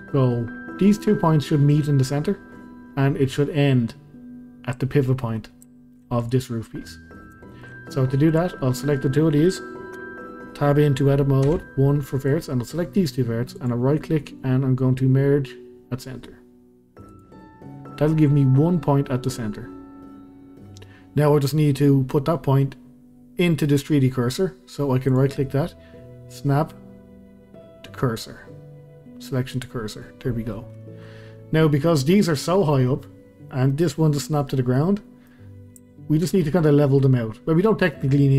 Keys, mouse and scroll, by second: 5.4-5.7 scroll down 1, 5.7-6.2 shift+middle drag, 6.2 click, 6.5-6.9 scroll down 1, 6.9-7.4 scroll up 1, 7.4-8.3 shift+middle drag, 8.3 click, 10.0 Tab, 11.5 1, 12.3 click, 13.5-17.9 right drag, 17.9-20.2 scroll up 2, 20.2-23.7 scroll up 1, 25.1-30.4 right drag, 30.4-31.4 scroll down 2, 32.0-35.5 middle drag, 35.5-35.9 scroll up 1, 35.9 shift+middle click, 36.6-38.2 scroll down 1.